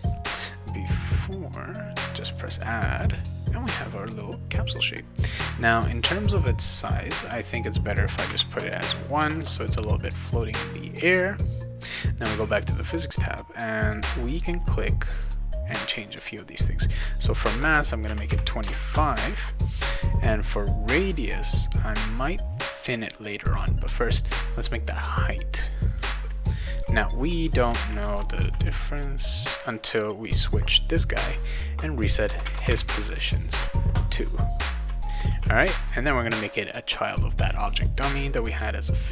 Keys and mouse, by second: 2.3 click, 5.8 click, 6.6 click, 6.8 click, 7.2 click, 7.4 click, 8.2 1, 12.0 click, 16.9 click, 17.1 click, 21.3 click, 24.3-26.8 drag, 27.4-29.1 typing, 27.7-29.2 right drag, 30.2 click, 31.2 click, 31.3 click, 32.4 Tab, 32.7 Tab, 34.4-36.0 typing, 34.6-36.0 right drag, 36.6 click, 38.0 click.